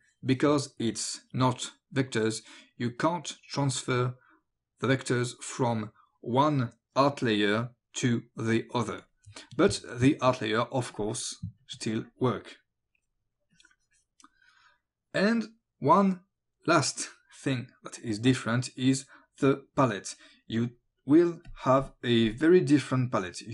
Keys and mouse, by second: 9.0 click, 9.7 space, 9.8 click, 10.9 click, 13.6 click, 21.2 click.